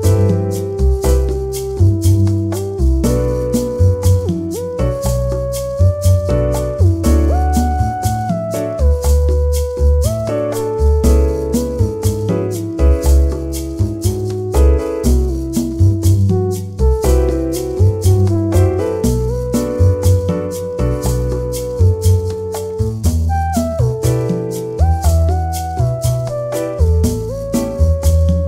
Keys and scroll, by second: 11.8 space, 27.5 0.